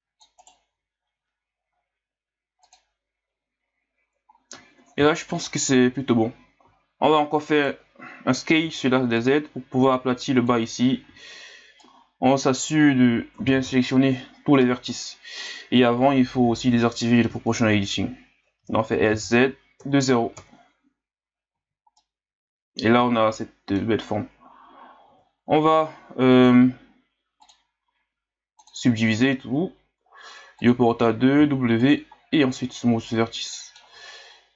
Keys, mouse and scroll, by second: 0.7 g, 4.4-5.2 scroll down 4, 5.9-7.5 scroll up 1, 7.5 right click, 8.6 b, 11.1 b, 13.4 s, 16.3 o, 18.5 s, 21.5 z, 22.0-25.0 middle drag, 25.1 Tab, 26.3-30.4 drag, 30.6-31.4 drag, 31.4 w, 32.2-32.6 scroll down 1, 32.6-33.9 middle drag, 33.9 Tab.